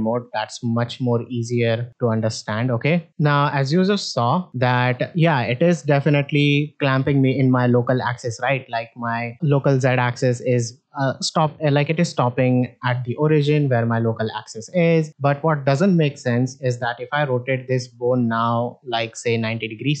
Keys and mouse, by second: 0.5 middle drag, 1.0 middle drag, 1.7 alt+z, 2.2 middle click, 2.7 shift+middle drag, 3.1 middle click, 4.0 alt+r, 4.6 middle click, 5.5-8.6 drag, 10.2-12.8 drag, 13.7 click, 18.2 r.